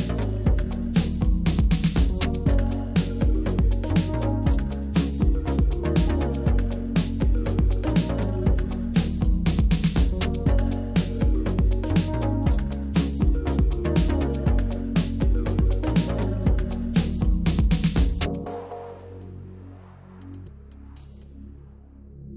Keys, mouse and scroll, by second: 2.8 click, 3.2 middle click, 4.0 Tab, 4.3-4.6 middle drag, 4.7 click, 5.4-6.0 drag, 6.9-7.5 middle drag, 7.8 KP_1, 8.6 click, 8.8 Tab, 10.7 click, 11.0 click, 12.8 g, 13.2 z, 13.6 click, 13.9 click, 15.9 z, 16.8 click, 17.3 Tab, 18.0 click, 18.3 drag, 18.6-18.9 middle drag, 19.3 KP_1, 19.8 shift+a, 20.9-22.3 drag.